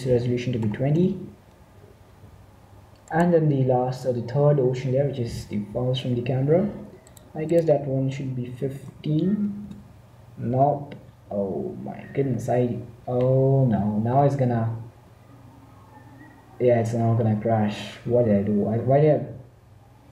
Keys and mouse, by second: 4.2-5.3 right drag, 7.6-9.1 drag.